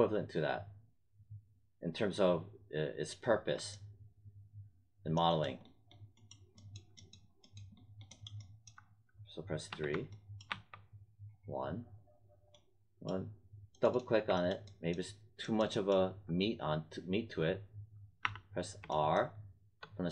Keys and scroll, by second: 9.6 3, 10.4 1, 18.2 r.